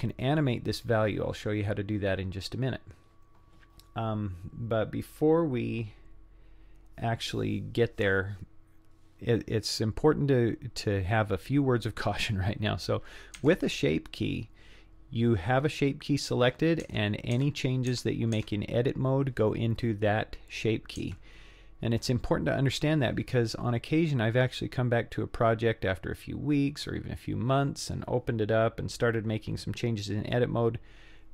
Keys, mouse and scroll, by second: 13.4 Tab, 16.9 Tab, 17.4 Tab, 17.9 Tab, 18.4 Tab, 21.0 Tab.